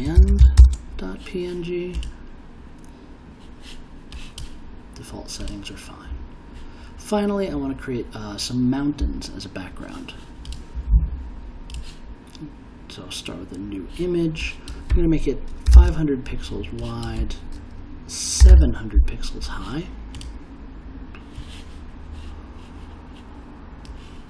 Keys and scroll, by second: 0.0-1.1 typing, 15.4-16.2 typing, 18.1-19.0 typing.